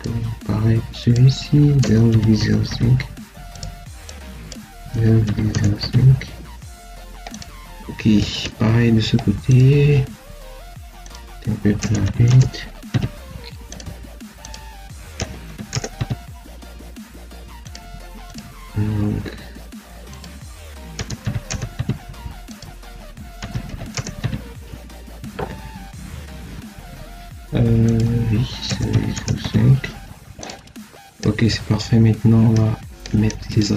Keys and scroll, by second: 1.7 0, 2.0 ., 2.3 0, 2.5 5, 4.8 0, 5.1 ., 5.4 0, 11.7 0, 11.9 ., 12.1 0, 15.1 0, 15.3 ., 15.6 0, 20.9 0, 21.1 ., 21.4 0, 23.3 0, 23.5 ., 23.8 0, 28.5 0, 28.8 ., 29.0 0.